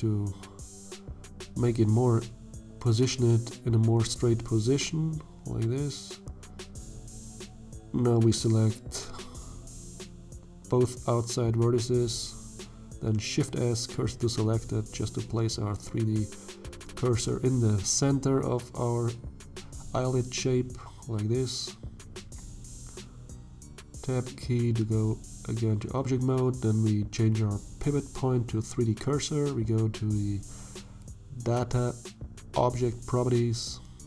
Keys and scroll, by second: 6.8 1, 12.0 shift+s, 22.1 Tab, 23.3 shift+z.